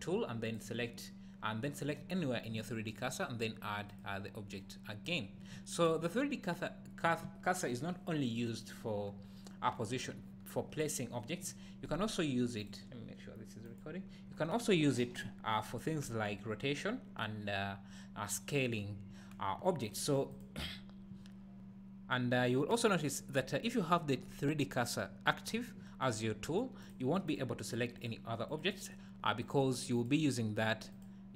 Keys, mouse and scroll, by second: 0.5 click, 3.9-20.4 drag, 22.7 click, 26.8 click, 27.3 click, 27.7 click, 28.0 click, 28.5 click, 28.8 click, 29.4 click, 29.9 click, 30.6 click, 30.9-31.3 drag.